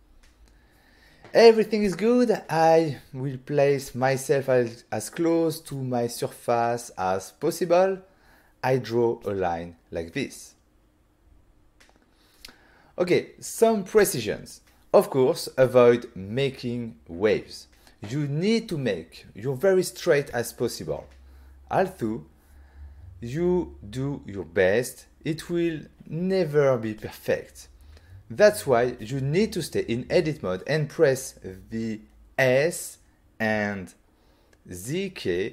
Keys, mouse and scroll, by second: 0.8 click, 1.2 click, 2.6 middle click, 4.0 middle click, 5.0 ctrl+middle click, 9.4 ctrl+middle click, 11.3 click, 13.6 click, 33.5 s, 34.8 z.